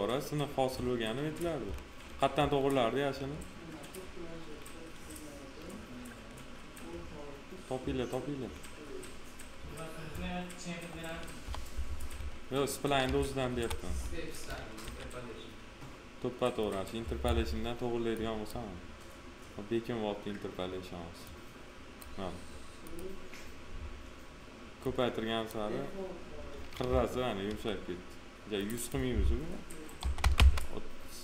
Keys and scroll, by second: 11.4 p, 14.8 f, 26.8 F4, 29.9 3, 30.3 Return.